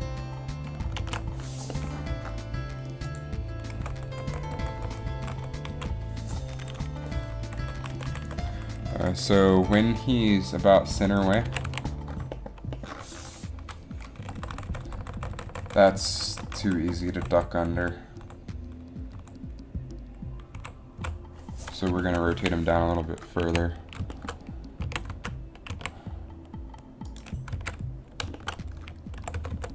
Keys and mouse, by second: 1.2 alt+a, 3.2 click, 3.9-5.2 Right, 5.4 Right, 5.5 Right, 5.8 Left, 7.6 Right, 7.8 Right, 7.9 Right, 8.1 Right, 8.3 Right, 8.4 Right, 8.6 Right, 8.7 Right, 8.8-9.8 Right, 11.6 a, 11.8 a, 14.4-17.1 Right, 17.3 Right, 17.4 Right, 17.7 Right, 17.9 Right, 18.3 Right, 19.3 Right, 20.7 Left, 21.1 Right, 22.5 a, 23.5 a, 25.0 a, 25.2 z, 25.9 a, 27.7 z, 29.4 r.